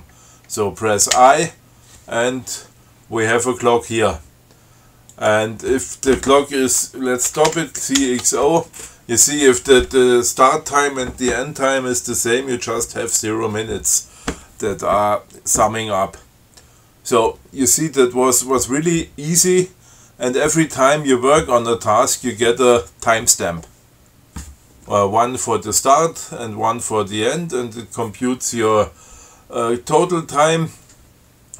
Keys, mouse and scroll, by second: 1.4 i, 5.4 click, 7.5 ctrl+c, 7.8 ctrl+x, 8.3 ctrl+o.